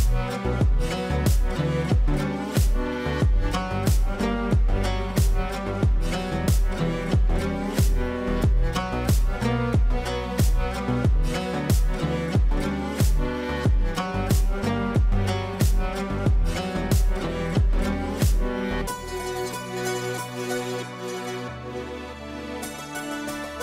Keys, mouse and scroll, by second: 0.9-6.6 drag, 2.8-5.3 drag, 9.5 click, 12.6 right click, 13.7-19.4 drag, 20.3 b, 21.1-23.6 drag.